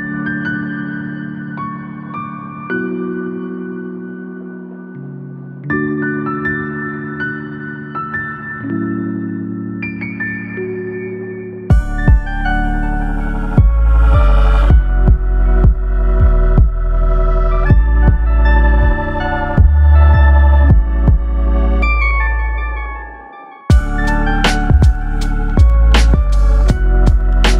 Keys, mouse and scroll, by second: 0.5 click, 1.3 click, 2.0 click, 2.7 click, 3.2 click, 3.7 click, 4.2 click, 4.5-4.8 scroll down 4, 4.8 middle click, 6.4-7.0 scroll up 4, 7.9 click, 9.5 click, 11.6 click, 12.9 click, 14.1 click, 15.0 click, 24.1 click, 24.8 click, 25.6 click, 26.2 click.